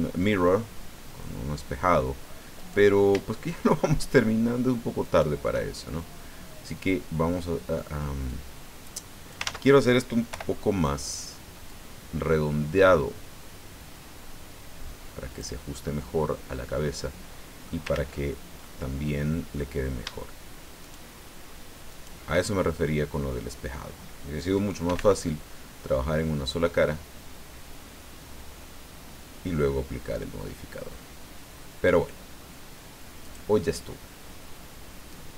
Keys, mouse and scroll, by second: 2.6 right click, 5.0 shift+right click, 8.3-9.5 drag, 9.4 ctrl+z, 10.3 o, 11.7-15.6 drag, 15.7 scroll down 1, 16.0-17.8 drag, 17.9 ctrl+z, 18.6-19.7 drag, 20.8 shift+right click, 21.9 shift+right click, 22.5-23.9 shift+middle drag, 24.6-25.4 typing, 26.8-27.4 scroll down 4, 27.7-28.4 scroll down 4, 29.2-33.2 scroll down 4, 33.2 click, 33.6-35.3 middle drag.